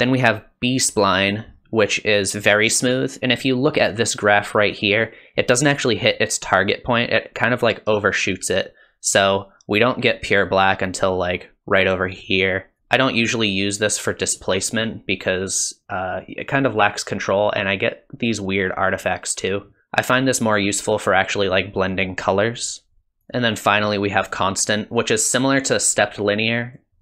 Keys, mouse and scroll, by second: 3.0 click, 12.8 click, 14.4 click, 23.1 click, 23.2 click, 26.1 click.